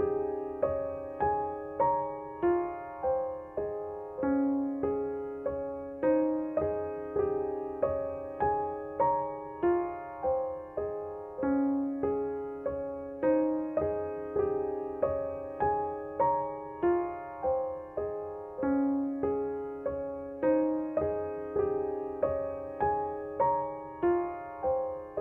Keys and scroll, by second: 15.6 0, 15.9 Return.